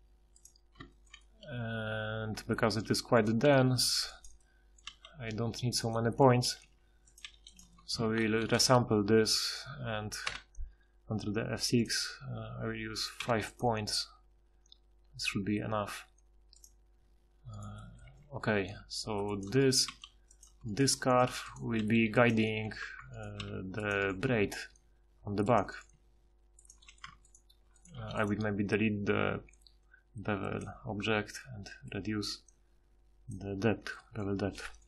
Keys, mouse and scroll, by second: 2.7 g, 3.4 g, 4.9 g, 6.4 r, 7.2 g, 8.2 ctrl+shift+h, 10.2 F6, 13.5 F6, 18.1 g, 19.9 g, 23.4 g, 24.7 g, 25.9 g, 27.1 Tab, 28.0 g.